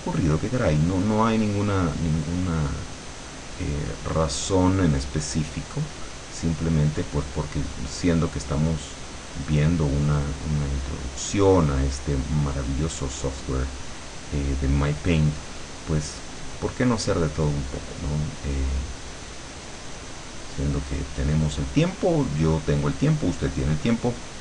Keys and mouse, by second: 5.3-7.3 drag, 7.7-10.7 drag, 10.9-12.5 drag, 12.7-13.9 drag, 14.2 click, 15.8-21.3 drag.